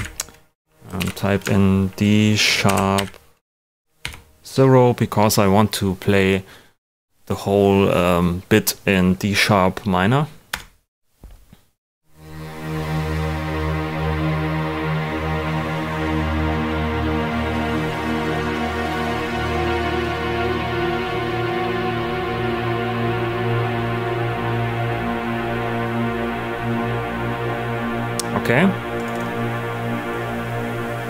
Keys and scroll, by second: 0.7 #, 0.9 super+a, 2.6 shift+d, 2.9 shift+#, 3.7 #, 5.0 0, 10.5 Return.